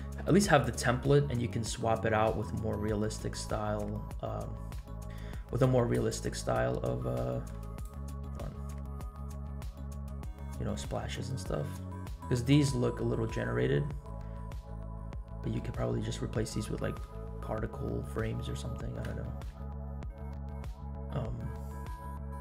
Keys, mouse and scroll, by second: 7.8 scroll up 1, 8.4 click, 8.4 middle click, 8.4-8.9 scroll up 2, 8.9-9.3 scroll down 2, 9.3-9.9 middle drag, 10.1 shift+middle click, 10.4 scroll up 2, 10.7 middle drag, 11.2-11.5 scroll up 2, 11.8-12.4 shift+middle drag, 14.6 scroll down 1, 14.9-15.7 middle drag, 16.6-17.1 shift+middle drag, 17.8 scroll down 2, 18.2-19.1 middle drag, 19.2 shift+middle click, 19.6 middle click, 20.1 scroll up 1, 20.3-20.9 shift+middle drag, 21.1 scroll down 1.